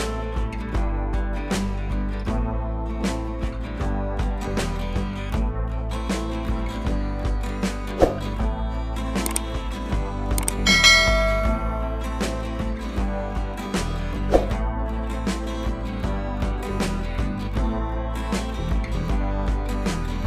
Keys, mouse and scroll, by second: 0.5-0.8 drag, 1.7 ctrl+z, 1.9 click, 5.9 b, 6.2 click, 6.9 ctrl+z, 7.6-7.9 click, 9.8 click, 10.9 click, 14.0 click, 15.4 [, 15.5 [, 15.6 [, 15.9 click, 16.3-16.6 shift+drag, 18.0-18.9 scroll down 1, 18.9 click, 19.1 scroll up 1.